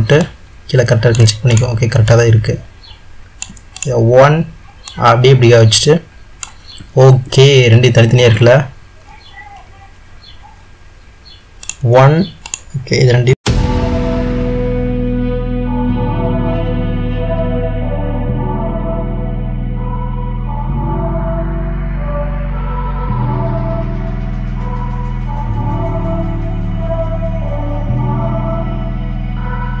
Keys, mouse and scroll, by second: 0.4-1.7 middle drag, 1.7-2.1 drag, 2.3-4.0 middle drag, 4.0 click, 5.1 click, 9.2 ctrl+z, 12.1 click, 12.7-13.1 shift+drag, 13.5 click, 14.2 shift+d, 15.2 shift+d, 16.0 shift+d, 16.8 shift+d, 18.2 drag, 18.5 shift+drag, 18.8 s, 19.3 click, 20.1 s, 21.0 shift+drag, 21.4 s, 22.2 click, 22.4 shift+drag, 22.8 click, 23.5 drag, 23.8 click, 24.6 click, 26.3-27.5 middle drag, 27.5 drag, 27.9 click, 28.1-29.8 middle drag.